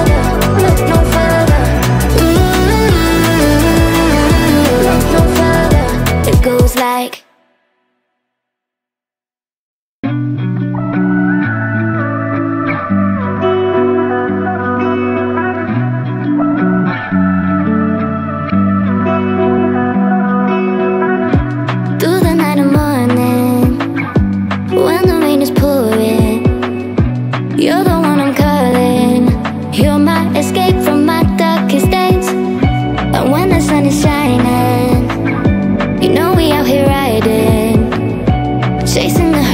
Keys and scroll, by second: 20.7 ctrl+2, 34.9 space.